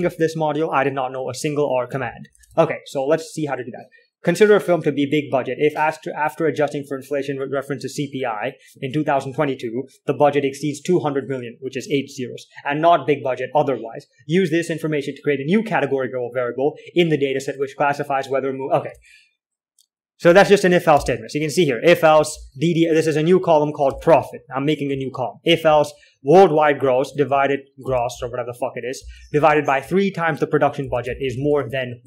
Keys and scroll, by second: 0.4 alt+Tab, 2.4 k, 2.7 alt+Tab, 19.4 alt+Tab, 20.6-27.5 typing, 29.2-31.8 typing.